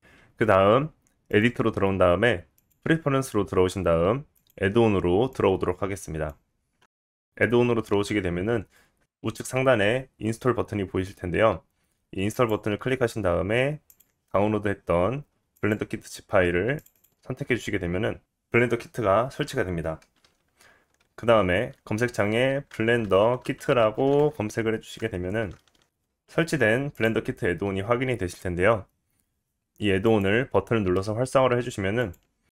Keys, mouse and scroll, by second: 0.0 click, 1.3-2.4 drag, 2.7 click, 3.7-4.3 drag.